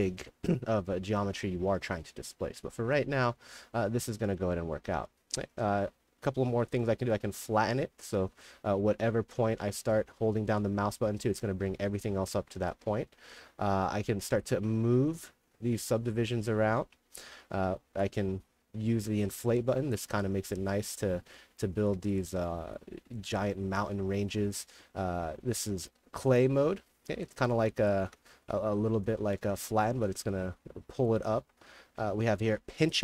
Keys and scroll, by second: 0.0-2.0 typing, 21.7-23.0 typing, 27.9-29.1 typing, 31.3-32.6 typing.